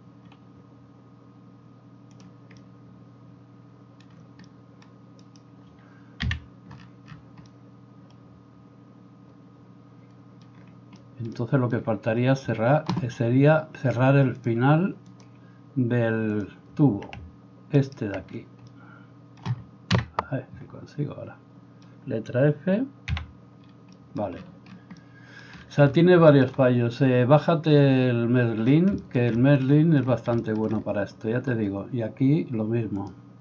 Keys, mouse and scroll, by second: 5.3-6.3 middle drag, 5.3-6.3 right drag, 6.3 KP_Decimal, 17.9 alt+middle click, 17.9 alt+right click, 20.0 KP_Enter, 20.0 KP_Decimal, 23.3 f.